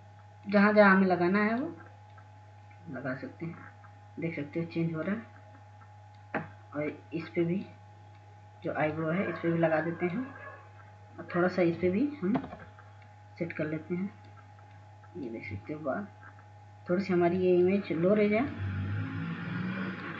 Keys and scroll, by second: 0.4 ], 0.5 ], 0.7 ], 14.8 [, 15.0 [.